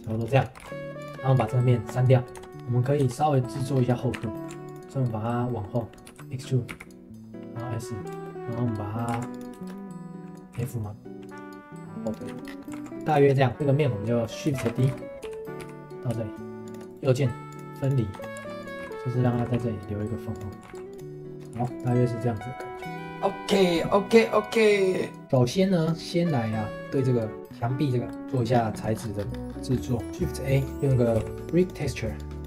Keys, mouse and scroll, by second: 0.5 g, 1.4 x, 2.1 middle click, 2.3 Tab, 2.6 scroll down 2, 2.8 middle click, 3.0 Tab, 3.3 middle click, 3.5-3.9 scroll up 2, 3.9 middle click, 4.1 2, 4.3 middle click, 4.6 alt+click, 5.1 middle click, 6.0 e, 8.2 middle click, 9.1 ctrl+s, 9.6 shift+middle click, 10.5 f, 11.8 g, 12.3 Tab, 12.4 scroll down 2, 12.6 middle click, 12.7 ctrl+s, 13.2 shift+middle click, 13.5 Tab, 14.2 middle click, 14.6 shift+d, 14.8 g, 16.9 right click, 18.1 Tab, 18.3 right click, 18.4 ctrl+s, 18.8 g, 19.4 g, 20.5 middle drag, 20.7 ctrl+s, 21.3 shift+middle click, 21.6 ctrl+s, 25.2 ctrl+s, 25.8-27.5 drag, 27.5-27.9 scroll down 3, 28.1 middle click, 28.1 ctrl+s, 28.7 middle click, 28.9-29.3 scroll down 2, 29.3-29.9 scroll up 10, 29.9 middle click, 30.1 shift+a, 32.2 click.